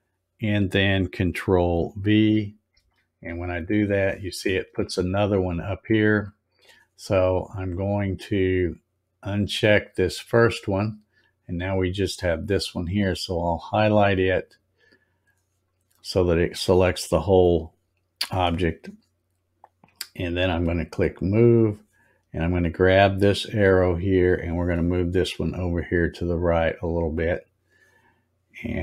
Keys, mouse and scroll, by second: 2.7 ctrl+v, 7.7 click, 9.9 click, 14.2 click, 21.1 click, 23.6-27.1 drag.